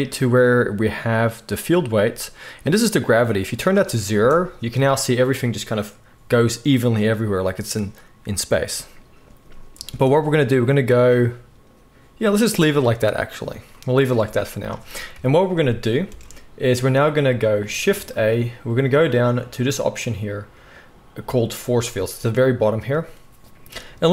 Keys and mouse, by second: 4.1 space, 9.8 space, 14.2 space, 15.1 KP_1, 16.1 space, 17.9 shift+a, 20.9-24.1 drag, 20.9-24.1 middle drag, 20.9-24.1 right drag.